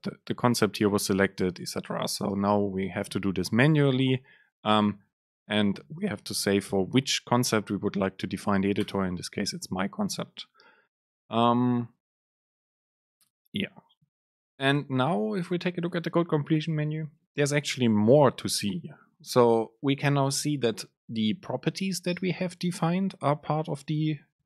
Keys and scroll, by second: 2.4 super+space, 14.5 super+space.